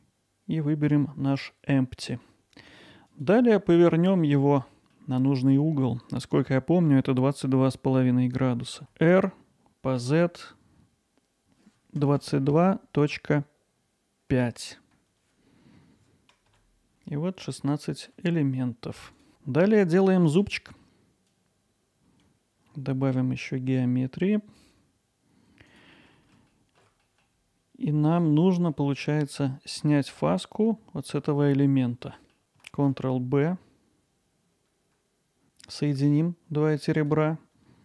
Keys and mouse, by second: 3.2-4.3 drag, 4.3 middle click, 5.8 middle click, 8.8 r, 10.0 z, 12.0 2, 12.2 2, 12.5 ., 14.3 5, 15.4 Return, 16.4 click, 16.9-18.1 alt+middle drag, 19.2-20.7 drag, 20.8 alt+middle click, 20.8 ctrl+r, 26.7 ctrl+alt+middle click, 27.1 middle click, 28.1-28.7 drag, 28.7 alt+middle click, 32.8 ctrl+b, 34.9 click, 35.2 alt+middle click, 35.4 shift+drag.